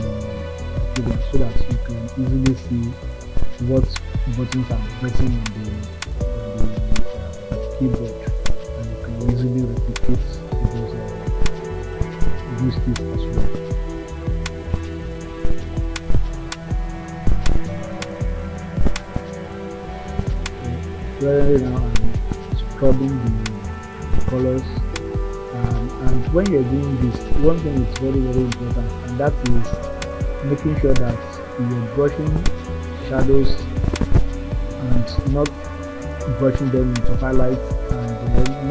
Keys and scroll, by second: 0.1 ], 7.2 [, 11.9 [, 20.0 [.